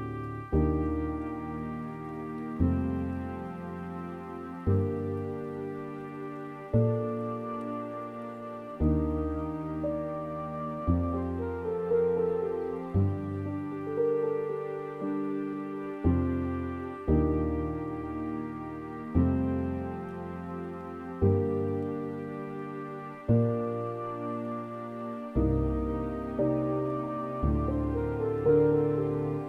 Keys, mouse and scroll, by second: 0.0-1.1 middle drag, 1.1-1.5 scroll up 2, 1.5-3.4 middle drag, 3.4 s, 4.7 scroll down 3, 5.2 scroll up 2, 6.3 ctrl+b, 10.9 scroll down 4, 11.3 middle click, 11.9 scroll up 2, 12.4 middle click, 13.3-13.7 scroll up 2, 13.7-15.5 scroll down 3, 15.9 alt+click, 16.8-17.3 scroll up 2, 17.8-29.4 middle drag.